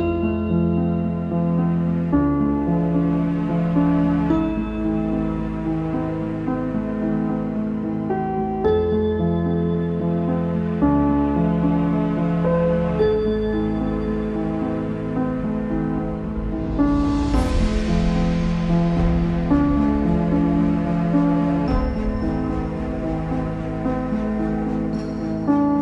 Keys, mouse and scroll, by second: 0.2 shift+middle click, 0.5-1.0 scroll up 2, 1.0 shift+middle click, 1.9 z, 2.2 shift+middle click, 2.5 Tab, 3.0 Tab, 3.4 shift+middle click, 4.2 click, 6.3 shift+a, 6.6 scroll down 2, 6.9 s, 8.3 click, 8.4 shift+middle click, 8.7-9.1 scroll up 3, 9.1 shift+middle click, 9.7 click, 10.4 s, 11.4 click, 12.4-13.5 shift+middle drag, 13.5 click, 15.3 s, 19.4 scroll up 1, 19.7 shift+middle click, 20.5 click, 22.1 z, 22.2-23.4 middle drag, 23.4 ctrl+s, 23.5 middle click, 24.5 click, 24.7 shift+middle click, 25.3 click.